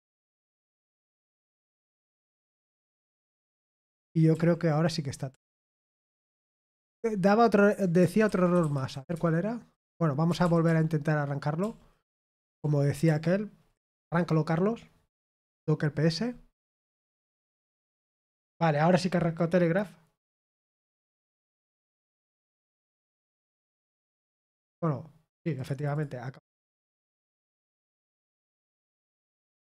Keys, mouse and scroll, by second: 0.3-1.2 typing, 3.3 ctrl+d, 3.8 ctrl+d, 4.3 ctrl+d, 5.3 ctrl+u, 5.6 ctrl+u, 5.8 ctrl+u, 6.0-7.9 ctrl+u, 8.0-9.4 typing, 10.6 ctrl+p, 11.6 ctrl+p, 12.0 ctrl+p, 13.9 Return, 17.2 typing, 17.5 Return, 25.5-27.0 drag.